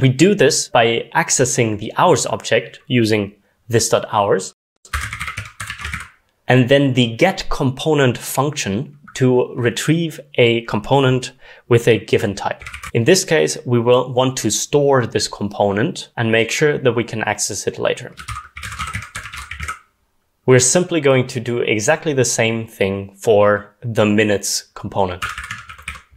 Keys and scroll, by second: 4.7-6.4 typing, 12.5-13.2 typing, 18.3-20.8 typing, 25.1-26.1 typing.